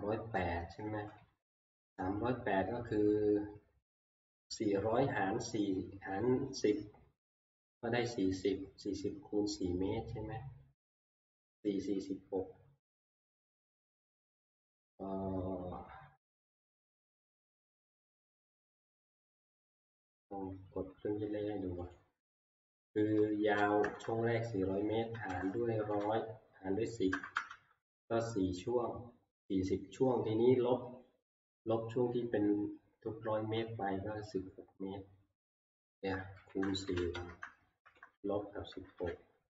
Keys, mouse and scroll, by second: 0.4 Down, 0.6 Down, 0.8 Down, 22.0-26.9 drag, 23.4-23.8 typing, 25.1-27.6 typing, 31.2 -, 36.3-39.0 typing, 37.1 Return.